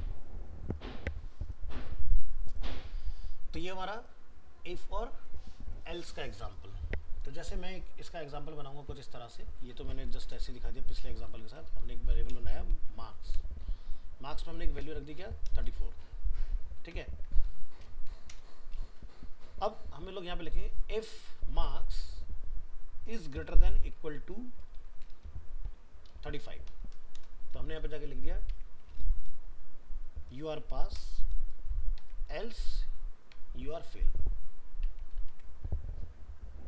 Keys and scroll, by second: 16.9 ctrl+s, 35.3 ctrl+s.